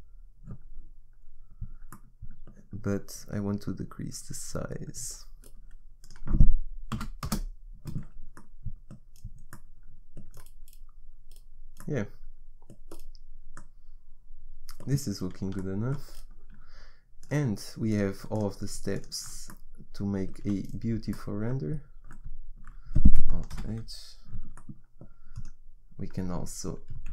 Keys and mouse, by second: 2.0-6.0 middle drag, 6.0-8.4 drag, 8.4 middle click, 12.9 middle click, 14.1 middle click, 17.2-20.0 middle drag, 20.2 middle click, 20.4 a, 23.7 alt+h, 26.5 click.